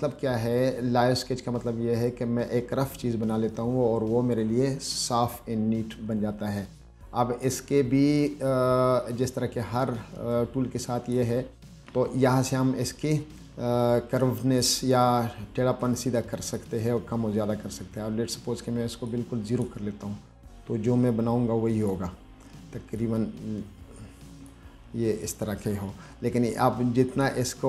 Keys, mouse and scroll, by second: 2.3-3.6 drag, 7.7-11.4 drag, 14.5-16.8 drag, 19.3 click, 20.7-22.2 drag, 23.2-24.7 drag, 27.4 click.